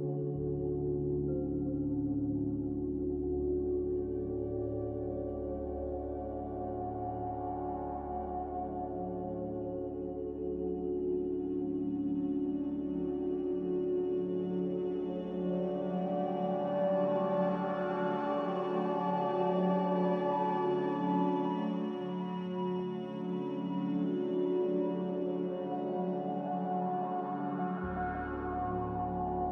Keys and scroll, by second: 0.0 z, 5.1-6.8 typing, 8.4 Tab, 9.4 Return, 12.2-12.9 typing, 14.1 x, 17.8-18.7 typing, 19.9 z, 22.3 a, 27.3 ctrl+z.